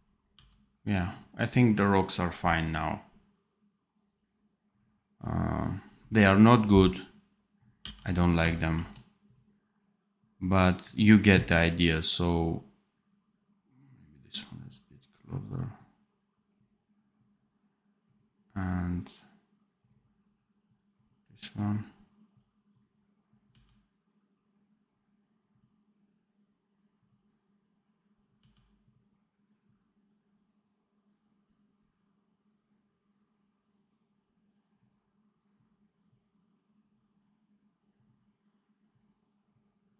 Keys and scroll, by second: 7.7 d, 8.5 ctrl+b, 23.4 d, 28.3 d.